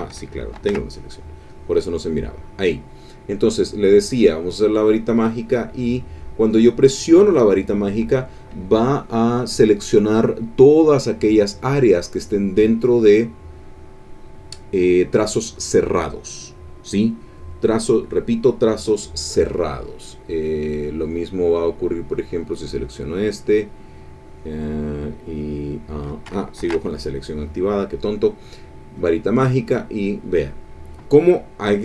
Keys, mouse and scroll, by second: 0.5 ctrl+shift+a, 1.5 click, 4.2 click, 5.1 click, 21.9 click, 22.6 click, 26.6 ctrl+shift+a, 27.0 ctrl+shift+click, 28.9 click, 29.6 click.